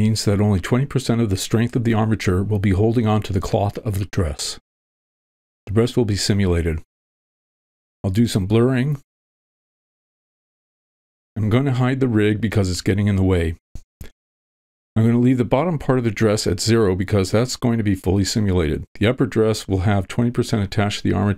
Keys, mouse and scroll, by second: 0.0 f, 0.0 v, 0.2 shift+middle click, 0.7-1.7 drag, 2.0 middle click, 2.8 shift+middle click, 3.0 middle click, 3.3 shift+middle click, 3.7 middle click, 4.1 click, 4.7 middle click, 4.9 click, 5.5 click, 5.7 middle click, 6.2 click, 6.5 middle click, 7.0 click, 7.4 middle click, 8.2 click, 8.6 v, 8.9 click, 9.5 middle click, 10.0 f, 10.3 click, 10.7 middle click, 11.0 click, 11.3 middle click, 13.6 click, 15.3 shift+middle click, 16.4 ctrl+middle click, 18.0 click, 20.0 click, 21.0 click.